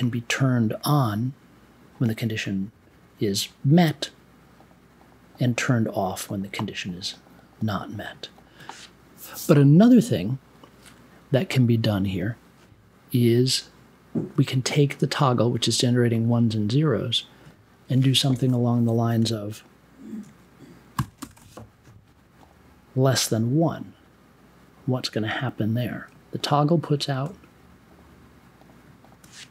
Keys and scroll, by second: 20.9 shift+,, 21.1 space, 21.3 1.